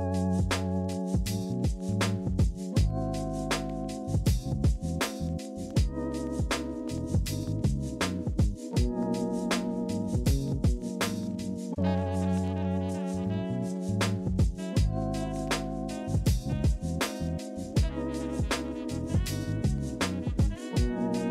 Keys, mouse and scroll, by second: 0.3 scroll up 4, 1.7-6.5 alt+scroll down 1, 6.7 alt+scroll, 8.2 alt+scroll, 8.9 ctrl+z, 21.0-21.3 alt+scroll down 2.